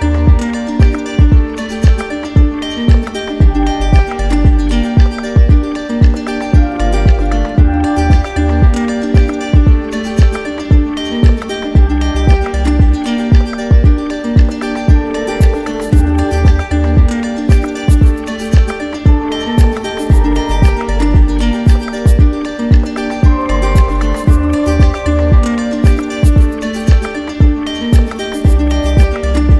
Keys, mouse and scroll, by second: 5.3 alt+click, 5.7 alt+click, 7.9 z, 9.5 right click, 10.5 click, 12.3 right click, 14.6 right click, 15.9 right click, 16.2 shift+right click, 17.1 alt+right click, 18.3 right click, 20.1 right click, 21.2 right click, 22.1 right click, 22.6 alt+click, 25.2 d, 27.3 right click, 28.4 right click, 28.9 right click.